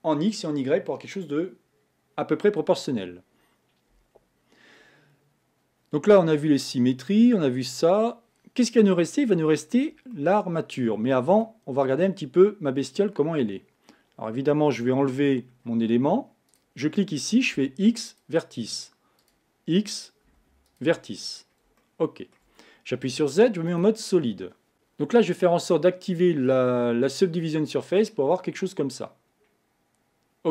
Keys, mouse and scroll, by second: 8.6-9.2 scroll down 6, 10.1-14.1 shift+middle drag, 14.1 scroll up 2, 14.9 shift+middle click, 15.5-16.5 scroll up 2, 16.5 click, 17.6 x, 19.2 click, 20.2 x, 21.3 scroll down 2, 21.8-22.9 shift+middle drag, 22.9 z, 24.2-24.7 scroll down 3, 24.7 click, 27.4 click, 28.1-30.5 middle drag.